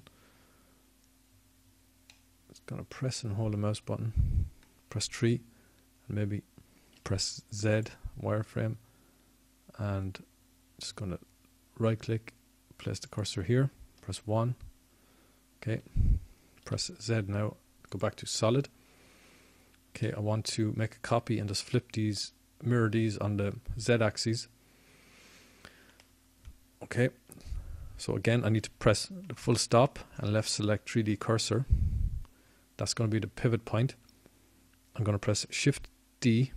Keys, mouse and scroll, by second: 10.1 KP_3, 12.2 z, 19.2 KP_1, 19.4 KP_1, 21.8 z, 23.1 z, 33.7 ..